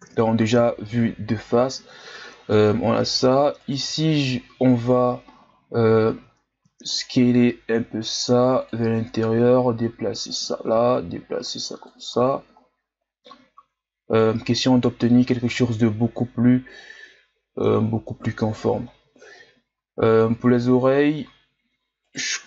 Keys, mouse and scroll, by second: 0.0 KP_1, 0.9-1.7 scroll up 3, 1.7-2.9 shift+scroll up 7, 2.9 Tab, 3.6 alt+right click, 5.4 ctrl+KP_Add, 5.9 ctrl+KP_Add, 7.5 s, 9.2-12.1 drag, 12.1 Tab, 12.6-12.9 scroll down 2, 15.3-15.8 shift+scroll down 3, 15.8-16.7 scroll up 4, 16.7-17.8 scroll down 5, 17.8-18.3 shift+scroll up 1, 18.8-20.0 ctrl+scroll up 9, 20.0 Tab, 22.0 alt+right click.